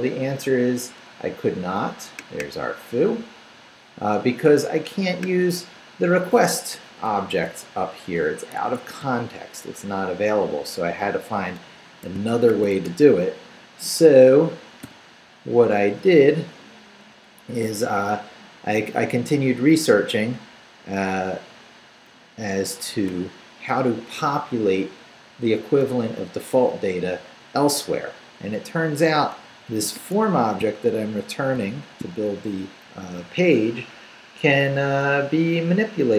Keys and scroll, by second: 8.6 Escape, 9.0 u, 12.3-13.2 typing, 14.8 o, 16.1 Down, 19.1 Down, 21.1 Up, 22.6 Up, 29.3 Down, 30.6 shift+Down, 31.5 shift+v.